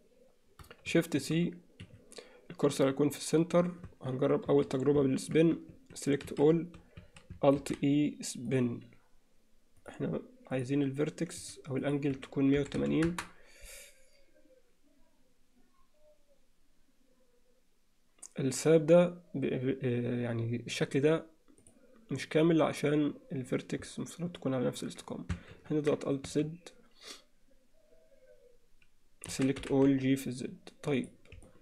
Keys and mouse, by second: 0.9 shift+c, 0.9 shift+x, 3.9 Tab, 4.5 a, 5.8 a, 6.3 alt+a, 7.0 a, 7.6 alt+e, 9.8 click, 10.6-11.6 drag, 13.1-18.2 drag, 25.6 ctrl+z, 26.3 a, 29.6 g, 31.5 alt+middle click.